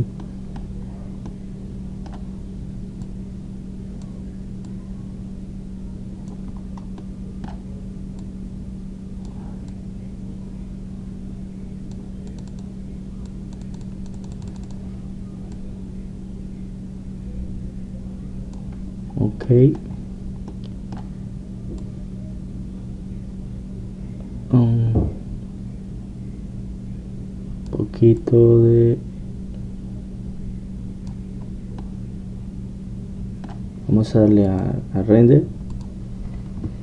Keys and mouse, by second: 4.1-7.6 drag, 7.7-9.3 middle drag, 9.3-13.1 drag, 13.3-18.6 drag, 20.1-22.9 middle drag, 22.9-24.8 drag, 29.2-30.9 middle drag, 30.9 click, 31.8-35.0 middle drag, 35.5-36.8 drag.